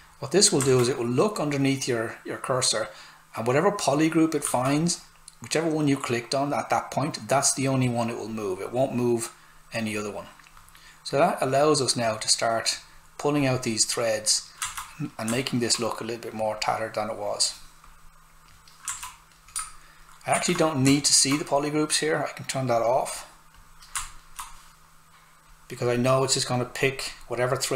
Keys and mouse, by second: 0.6 alt+right click, 4.4 s, 4.5 click, 14.7 alt+right click, 16.3 click, 18.9 alt+right click, 20.3 shift+f, 20.9 alt+right click, 22.7 click, 24.1 alt+right click, 25.4 click.